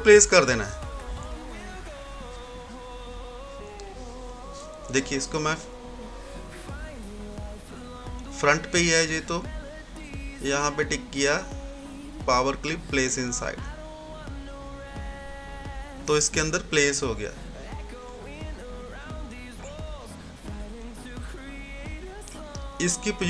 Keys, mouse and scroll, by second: 4.8 right click, 4.8 typing, 6.4 click, 9.7 click, 9.7 typing, 14.3 click, 17.8 click, 20.6 typing.